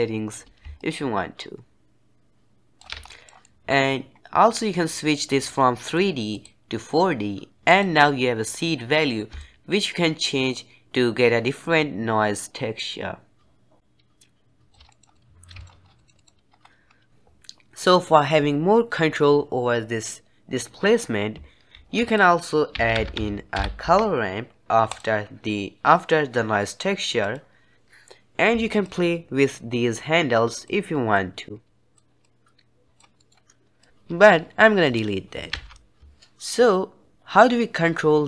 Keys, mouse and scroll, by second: 2.9 scroll up 1, 3.0-6.2 middle drag, 6.2-12.3 drag, 14.8 middle drag, 15.0 scroll down 1, 15.1-15.8 middle drag, 15.8 scroll down 4, 15.9 middle click, 16.4 scroll down 2, 16.8 scroll up 1, 21.6 shift+a, 28.7-33.1 drag, 33.1 middle click, 33.8 click, 34.7 click, 35.4 ctrl+x, 36.4-36.9 scroll up 1.